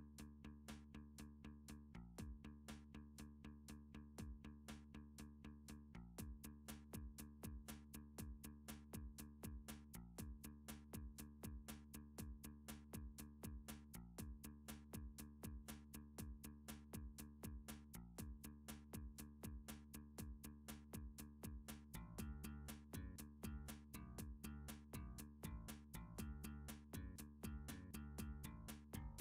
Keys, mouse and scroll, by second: 1.7 click, 3.2 s, 4.1 y, 6.3 click, 7.1 click, 7.9 s, 8.2 x, 9.5 click, 10.5 click, 10.7 click, 11.4 c, 13.6 click, 13.6 right click, 14.1 s, 15.1 y, 17.5 click, 18.2 g, 19.5 y, 20.9 click, 21.9 click, 22.6 s, 22.8 x, 24.5 click, 25.4 click, 26.0 s, 26.2 x, 28.7 right click, 29.0 click.